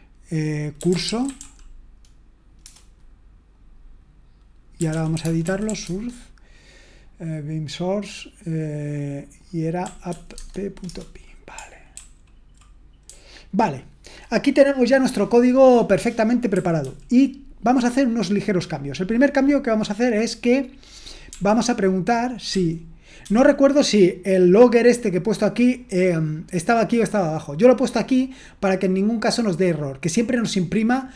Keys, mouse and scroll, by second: 1.2 typing, 5.2 typing, 5.8 Tab, 10.1-10.8 typing, 11.9 ctrl+d, 12.8-14.0 typing.